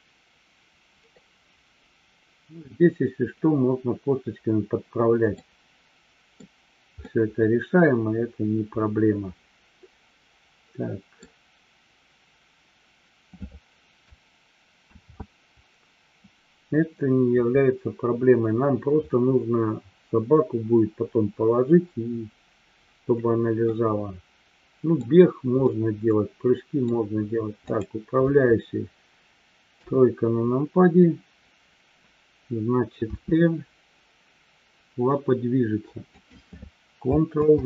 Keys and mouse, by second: 1.2-2.6 middle drag, 5.3-6.3 middle drag, 7.1-11.2 middle drag, 15.3 ctrl+z, 23.7-25.0 middle drag, 25.7-27.0 middle drag, 29.7 KP_3.